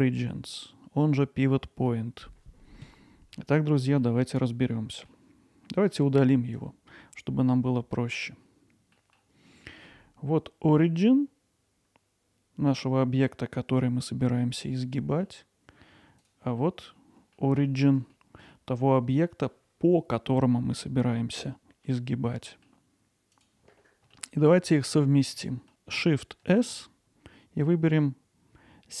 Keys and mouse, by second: 0.2-0.6 middle drag, 1.0-1.9 middle drag, 3.4-4.0 middle drag, 4.5-5.1 middle drag, 6.6 click, 9.0 middle click, 9.6 middle click, 14.7-15.3 middle drag, 16.6 middle drag, 17.4 middle drag, 18.1-18.5 alt+middle drag, 21.1-21.9 middle drag, 22.4 middle drag, 23.3 click, 24.1 middle drag, 24.9 alt+middle click, 25.4 middle drag.